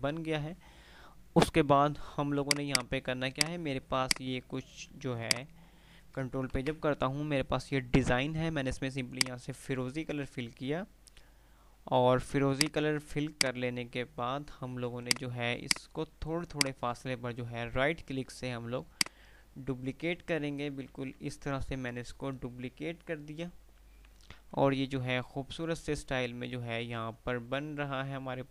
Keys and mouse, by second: 2.5 click, 5.0 F2, 5.3 click, 5.6 F2, 6.8 shift+Page_Up, 9.0 click, 11.5 F3, 12.8 F2, 12.8 click, 15.2-19.0 drag, 19.0 ctrl+right click, 20.2 ctrl+r.